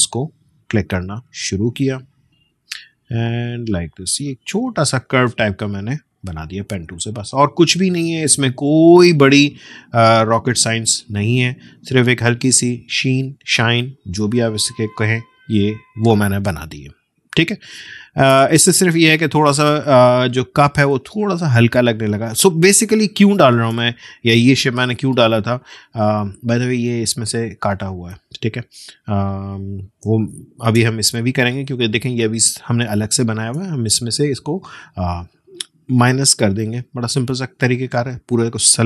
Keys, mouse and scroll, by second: 0.8-15.1 drag, 16.6-17.4 alt+scroll down 1, 17.8 space, 18.0 click, 18.8-19.4 alt+scroll up 1, 19.8-21.2 drag, 21.7-22.2 alt+scroll down 1, 22.5 space, 22.7 click, 23.0 space, 25.0 alt+scroll up 1, 26.9-28.6 drag, 28.6-29.3 alt+scroll down 1, 30.0 space, 30.2 click, 30.6 space, 31.4-31.8 alt+scroll up 1, 32.2 click, 32.8 space, 33.0 click, 33.3 space, 35.2-38.8 drag.